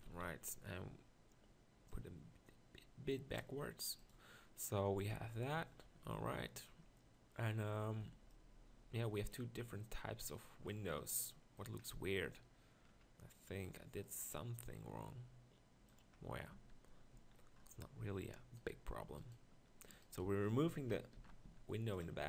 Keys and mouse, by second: 0.1 Tab, 0.1 z, 10.6-11.8 middle drag, 14.8 middle click, 16.6 Tab, 17.1 z, 21.1 ctrl+l, 21.4 x.